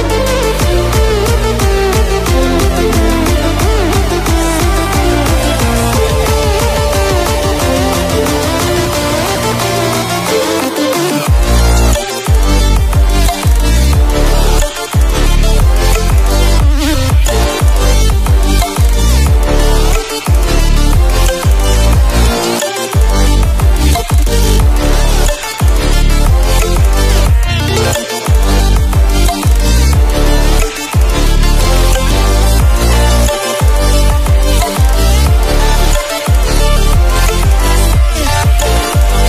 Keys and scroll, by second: 9.6 Return, 15.3 alt+7, 16.8 Escape, 33.4 Escape, 36.9 alt+a.